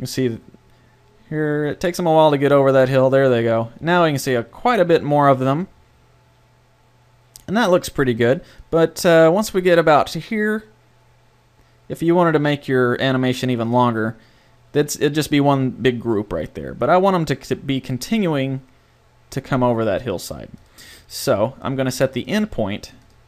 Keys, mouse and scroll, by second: 8.2-10.4 drag, 20.6-23.2 drag.